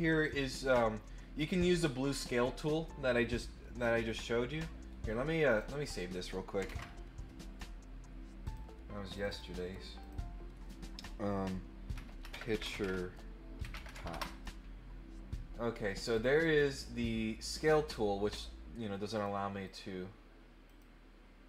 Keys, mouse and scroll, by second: 5.4 click, 8.4 click, 9.1 click, 9.3 click, 10.0 click, 15.9 click, 17.6 click, 19.1 click, 19.6 click, 20.6 click.